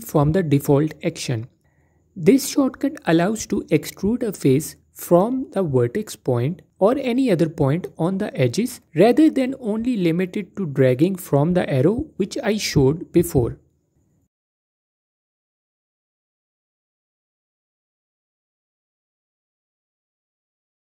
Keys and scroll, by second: 7.8 typing, 11.3 typing, 14.7 typing, 17.9 typing.